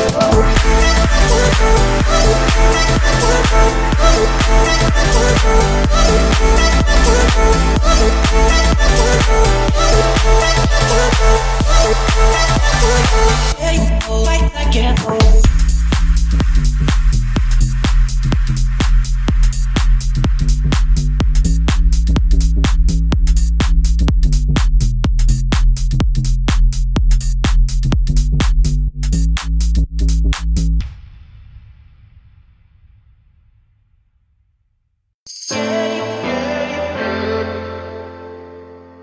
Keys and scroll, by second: 3.0 3, 4.2 Return, 9.1 Escape, 23.3 1, 24.1 0, 25.5 Return, 33.0 5, 33.8 Return.